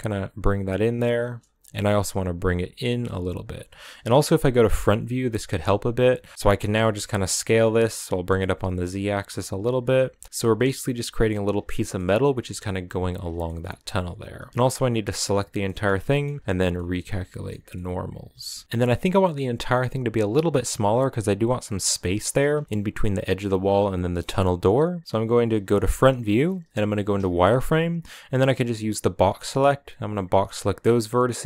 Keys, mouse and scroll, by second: 1.4 g, 4.8 KP_1, 5.7 scroll up 3, 6.1 shift+middle click, 6.5 s, 10.2 middle click, 11.1-11.4 scroll down 1, 11.4-14.5 shift+middle drag, 14.5 l, 14.9-15.4 scroll down 2, 15.4-16.4 middle drag, 16.4 shift+n, 16.5 middle click, 17.3 scroll up 2, 17.4 Tab, 17.5-19.6 middle drag, 19.6-21.4 scroll up 2, 21.4-21.7 scroll down 2, 21.7-25.2 shift+middle drag, 25.2 KP_1, 26.9 z, 29.7 b, 31.3 b.